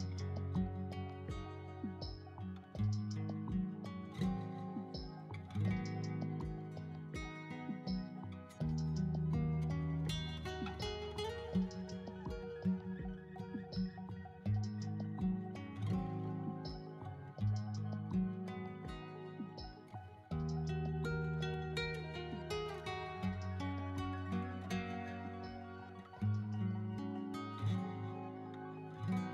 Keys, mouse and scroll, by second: 0.0 ctrl+b, 0.5 click, 1.0 middle click, 1.0 click, 1.3 scroll down 2, 1.4 shift+middle click, 1.6 middle click, 2.0 scroll up 2, 2.2 middle click, 2.6 middle click, 3.0 middle click, 3.5 middle click, 4.2 middle click, 4.3 shift+middle click, 4.5 1, 4.6 middle click, 4.9 alt+z, 5.0 middle click, 5.1 shift+middle click, 5.5 scroll down 1, 5.5 shift+middle click, 5.7 click, 6.1 middle click, 6.5 scroll down 2, 6.7 s, 6.8 x, 7.8 middle click, 7.8 click, 8.7 scroll down 4, 9.1 Tab, 9.2 middle click, 9.3 right click, 9.7 Tab, 9.8 middle click, 10.0 scroll up 4, 10.2 middle click, 10.5 middle click, 10.5-11.0 scroll down 1, 11.1 shift+middle click, 11.7 shift+middle click, 12.1 scroll down 1, 12.2-13.5 shift+middle drag, 13.5 scroll down 1, 14.2 shift+middle click, 14.2-14.9 scroll up 4, 17.8 ctrl+r, 18.4 click, 18.6 ctrl+b, 19.3 click, 19.5 scroll up 2, 19.5 middle click, 20.0 3, 20.1 right click, 20.7 alt+shift+z, 20.7 shift+right click, 21.2 middle click, 21.6 shift+middle click, 21.8 middle click, 22.9 middle click, 23.3 KP_3, 23.5 KP_1, 23.9 KP_7, 24.4 middle click, 24.4 KP_9, 24.8 alt+middle click, 25.0 scroll down 3, 25.1 shift+middle click, 25.4 alt+shift+middle click, 25.7 shift+middle click, 25.7-26.2 scroll up 3, 26.3 e, 28.1 click, 28.1-29.3 typing.